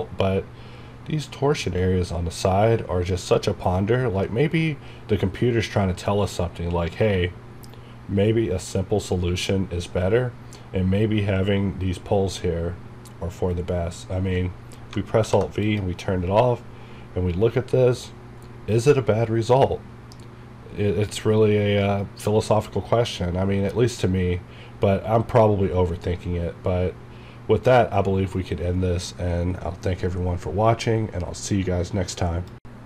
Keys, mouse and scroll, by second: 15.2 alt+v, 15.7 click.